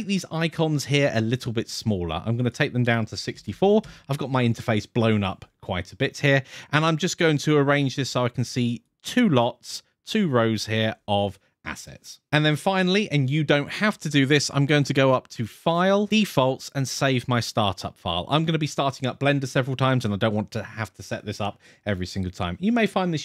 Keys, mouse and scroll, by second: 1.2 click, 7.3-8.3 drag, 14.9-15.9 drag.